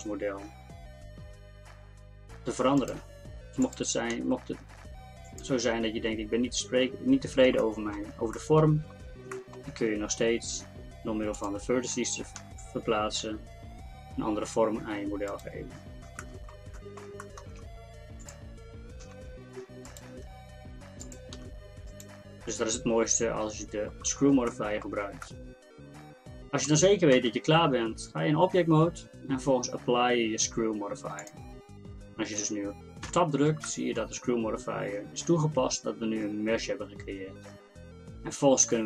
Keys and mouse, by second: 3.7-6.4 drag, 4.2 g, 7.6-9.4 drag, 9.4 middle click, 9.8-11.4 drag, 11.4 middle click, 11.7 click, 12.4 g, 17.7 middle click, 18.3-21.4 right drag, 19.1 g, 21.4 g, 22.7-24.5 drag, 27.2 KP_1, 27.9 Tab, 33.1 Tab.